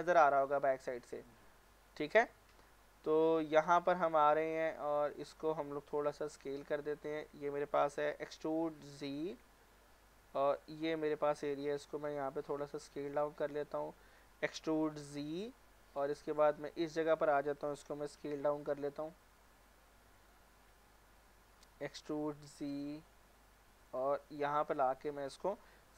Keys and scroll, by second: 6.0 s, 8.1-8.7 typing, 11.8 s, 14.4-15.0 typing, 18.2 s, 21.9 e, 22.5 z, 25.0-25.8 typing.